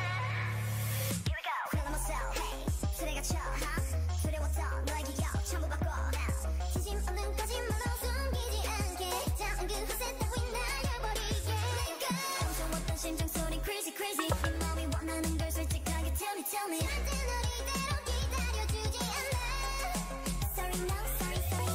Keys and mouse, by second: 0.0-2.5 drag, 2.5 Tab, 2.7 a, 9.3 middle click, 17.2-21.7 middle drag.